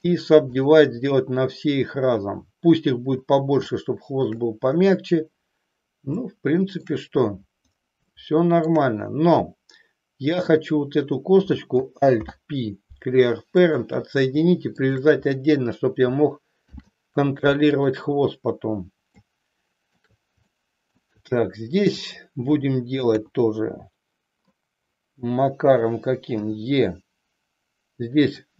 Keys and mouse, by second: 3.8 shift+middle click, 6.2 shift+middle click, 8.1 shift+middle click, 10.2 click, 12.1 alt+p, 14.7 shift+click, 16.6 ctrl+p, 19.3 shift+middle click, 20.6 shift+middle click, 22.1 click, 23.1 KP_3, 26.3 e.